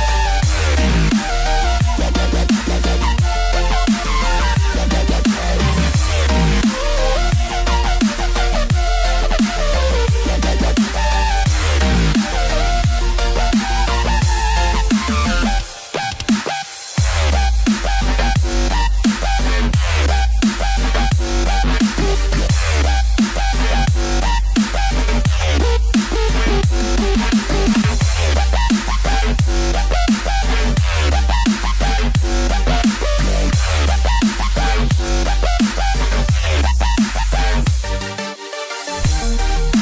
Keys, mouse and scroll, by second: 1.3 scroll down 1, 1.6 middle click, 4.6 click, 6.0 click, 7.7 e, 12.1 click, 12.8 click, 12.8 middle click, 15.6 click, 16.3 click, 16.4 middle click, 18.8 middle click, 18.9 shift+click, 20.5 ctrl+b, 23.8 ctrl+b, 23.8 click, 24.3 scroll down 3, 24.6 middle click, 28.1 KP_3, 29.2 KP_3, 29.2 scroll up 3, 30.3 shift+middle click, 33.7 shift+middle click, 33.8 ctrl+r.